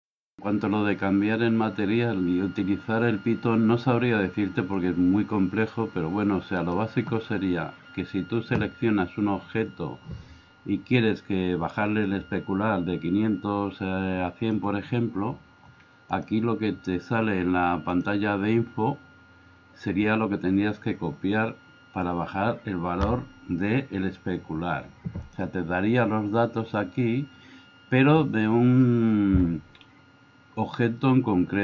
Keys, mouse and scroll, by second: 11.8-14.6 drag, 16.1 click, 17.9-19.2 drag, 25.4 drag.